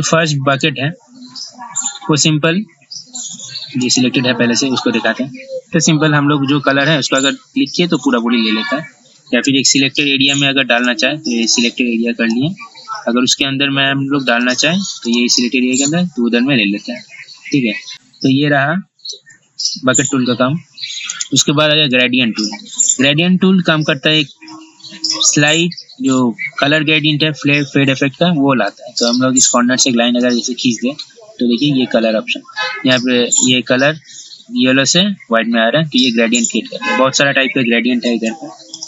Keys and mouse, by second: 0.8 right click, 4.0 click, 9.6 ctrl+z, 11.0-13.2 drag, 17.9 ctrl+z, 19.3 ctrl+d, 21.3 right click, 22.1-30.9 drag, 38.3 ctrl+z.